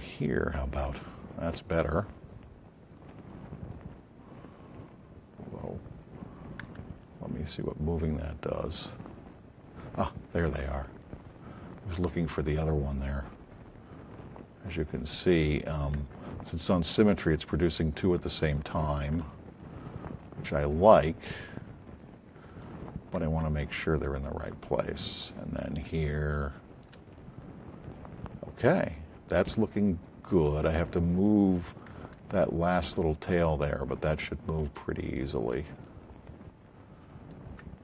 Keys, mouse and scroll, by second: 0.0 click, 7.5-9.1 drag, 15.0-16.1 alt+drag, 17.2 click, 19.3 alt+click, 21.1-22.8 alt+drag, 23.9 click, 31.4-32.1 alt+drag, 33.4 click, 35.6 alt+click, 35.9-37.3 alt+drag.